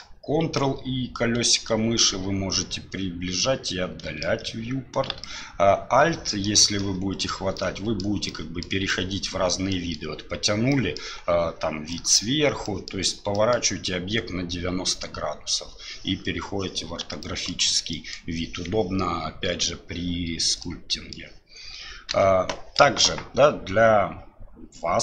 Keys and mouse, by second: 0.6 ctrl+click, 1.1-2.9 ctrl+middle drag, 2.9-4.2 ctrl+drag, 5.2-6.5 alt+drag, 6.8 alt+click, 7.6 alt+click, 8.3 alt+click, 8.9 alt+click, 9.7 alt+click, 10.7 alt+click, 11.9 alt+click, 12.7 alt+click, 13.3 alt+click, 17.2 alt+click, 17.9 alt+click, 20.6 click, 22.1 n.